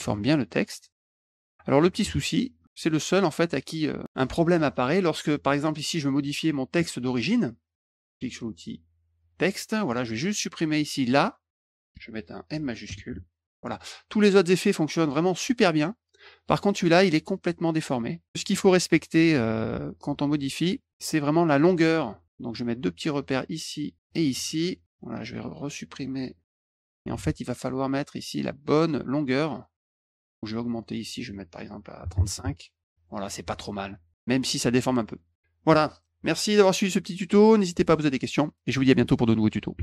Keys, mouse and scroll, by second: 0.9 click, 1.4 click, 2.6 middle click, 9.2 click, 10.8 click, 12.8 shift+m, 13.7 click, 14.2 click, 15.0 click, 15.5 click, 16.2 click, 18.5 ctrl+z, 19.1 ctrl+z, 19.6 ctrl+z, 20.0 ctrl+z, 20.9 click, 22.2 click, 23.9 click, 25.3 click, 26.6 shift+m, 26.9 click, 27.1 ctrl+a, 30.8 click, 35.0 click, 35.3 middle click, 39.7 Tab.